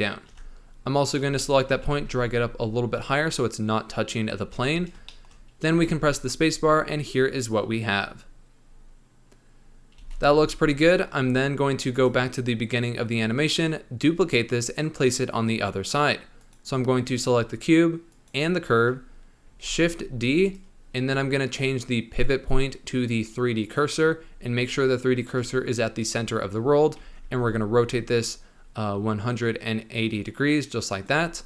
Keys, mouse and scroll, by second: 0.2 Tab, 0.3-1.0 scroll up 3, 1.0 click, 1.3 shift+middle click, 1.7 g, 4.5 Tab, 4.7 scroll down 1, 5.0 shift+middle click, 5.6 space, 9.2-9.8 scroll down 3, 9.9 space, 10.3 z, 10.7 scroll up 1, 11.8-13.1 drag, 13.1-13.8 scroll up 2, 16.3 click, 18.0 shift+click, 19.5 shift+d, 22.0 click, 22.4-25.4 drag, 26.5 scroll down 1, 26.9 r.